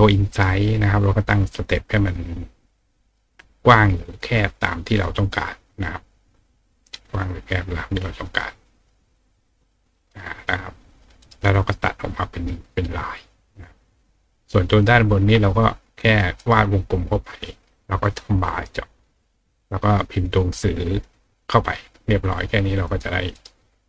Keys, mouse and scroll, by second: 3.0 click, 4.1 click, 5.2 click, 7.3 click, 8.7 click, 9.9 click, 10.9 click, 11.2 right click, 13.5-14.8 drag, 16.4 right click, 17.4 click, 20.2 click, 20.9 click, 22.4 click, 22.8 click, 23.3 right click.